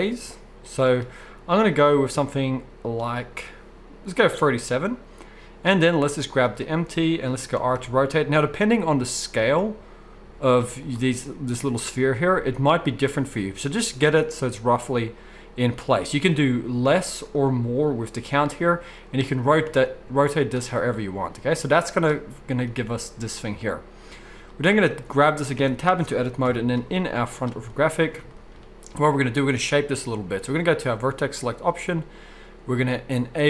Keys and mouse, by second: 6.5-23.6 middle drag, 7.3 r, 19.3 r, 21.7 z, 24.9-25.6 drag, 25.6 Tab, 26.4 KP_1, 27.0 z, 28.2 shift+drag, 28.6-29.9 middle drag, 29.9-33.4 drag.